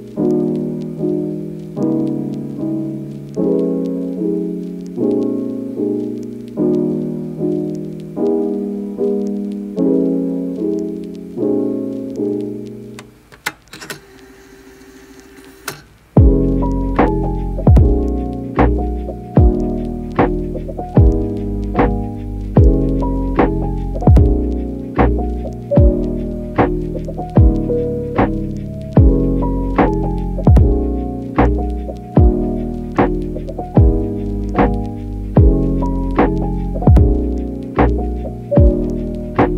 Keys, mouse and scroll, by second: 0.0-0.2 typing, 1.8 Tab, 3.2 Tab, 4.7 Tab, 6.5 click, 6.7 Tab, 7.1 click, 7.7 e, 9.2 Tab, 12.6 shift+click, 12.9 shift+a, 14.4-17.1 typing, 17.7 Tab, 18.4 Tab, 18.8 click, 19.3 a, 19.5 right click, 20.3 click, 21.9-23.1 drag, 23.2 click, 23.8 g, 25.4 g, 26.8 click, 27.7 KP_1, 28.6 g, 29.4 click, 30.5-39.5 typing, 32.6 click, 37.7 click.